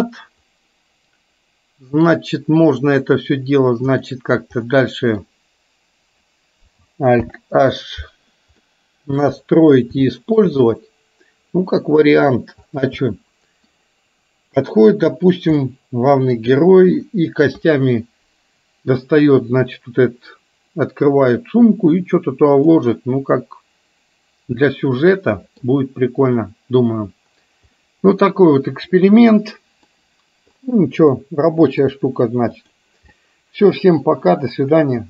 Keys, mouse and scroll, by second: 2.8 click, 4.0 click, 4.8 middle click, 7.3 alt+h, 8.8-9.4 middle drag, 10.3-10.6 shift+middle drag, 10.8-12.4 middle drag, 13.1-13.8 middle drag, 15.3 click, 15.6-16.5 middle drag, 22.8-25.8 middle drag, 28.0-30.0 middle drag, 31.3-31.9 middle drag, 33.3-34.8 middle drag.